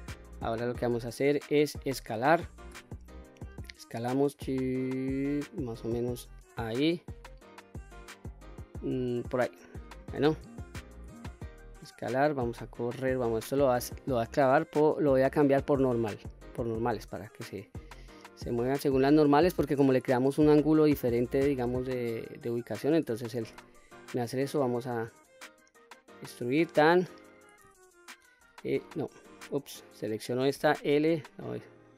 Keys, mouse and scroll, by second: 2.4 s, 8.9 click, 9.4 middle click, 11.0 shift+middle click, 13.9-15.9 drag, 16.3-17.5 scroll up 2, 17.5-18.8 drag, 19.1-23.2 middle drag, 23.2 e, 26.0 click, 26.6-27.0 middle drag, 28.1 l, 29.5 click, 30.3 l, 31.6-31.9 middle drag.